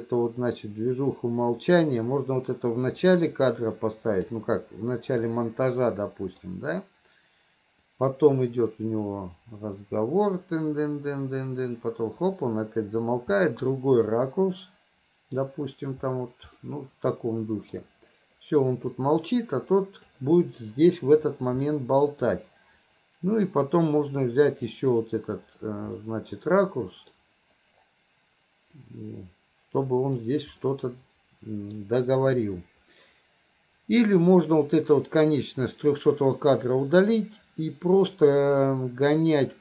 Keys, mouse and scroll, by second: 5.3-6.5 middle drag, 8.0-13.1 drag, 13.4-15.4 middle drag, 16.6-17.8 middle drag, 19.0-20.2 drag, 21.8 middle click, 23.5-24.8 drag, 26.0-27.1 middle drag, 28.8-30.3 drag, 30.6-31.8 middle drag.